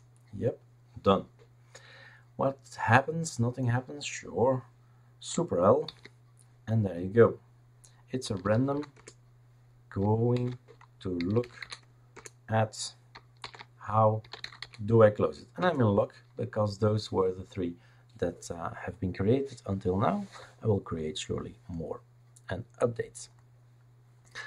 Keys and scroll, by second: 5.9 super+l, 8.0-9.2 typing, 10.3 super+l, 10.9-12.1 typing, 12.1 Return, 13.4 super+l, 14.1-15.1 typing, 15.6 Return.